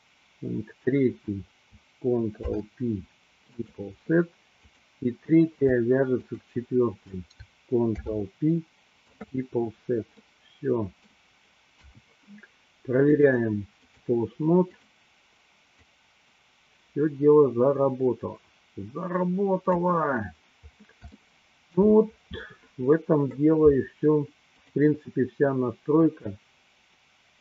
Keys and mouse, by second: 2.5 ctrl+p, 4.6 click, 6.2 shift+click, 7.9 ctrl+p, 10.2-11.3 middle drag, 12.0 KP_1, 13.1 click, 16.0-19.8 drag, 21.2 shift+middle click, 26.1-27.4 drag.